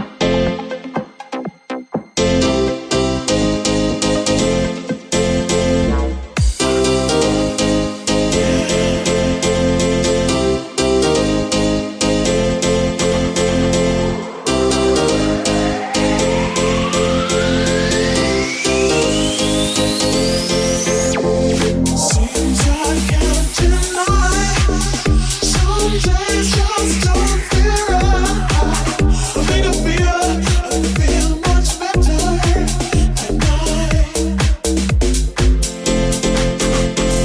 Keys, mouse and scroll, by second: 0.7 ctrl+z, 3.2 ctrl+a, 3.7 Tab, 4.3 ctrl+a, 4.8 middle click, 5.0 Tab, 5.2 click, 5.3-6.6 middle drag, 5.6 l, 5.9 p, 6.4 Tab, 6.6 click, 6.7-11.9 middle drag, 7.1 w, 8.8 Tab, 9.5 click, 10.7 Tab, 12.5-17.4 middle drag, 17.4-37.2 middle drag, 17.7 g, 19.1 r, 19.8 g, 20.3 r, 20.9 g, 22.0 r, 22.8 g, 23.8 r, 32.0 g, 33.4 r, 34.3 g.